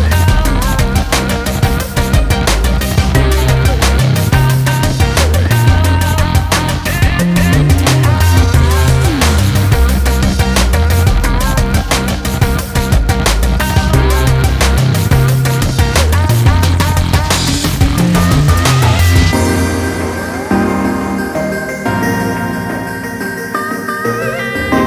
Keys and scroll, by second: 3.5 ctrl+z.